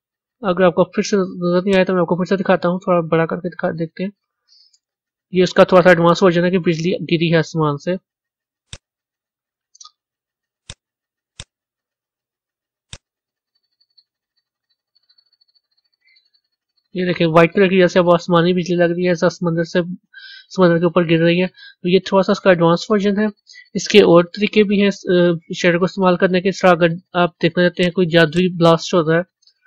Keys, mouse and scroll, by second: 1.6-11.6 drag, 12.8-15.4 drag, 15.4-26.6 middle drag, 27.7 click, 28.2 click, 29.1-29.6 scroll down 2.